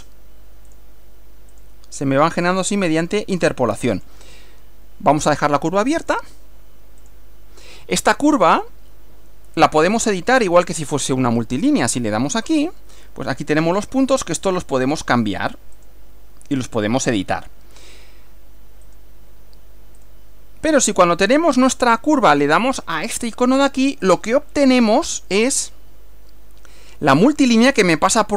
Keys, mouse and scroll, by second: 0.7 click, 1.6 click, 2.5 click, 4.0 click, 6.0 click, 7.0 click, 8.6 click, 9.8 click, 12.5 click, 14.5 click, 15.8 click, 18.9 click, 20.0 click, 24.1 click.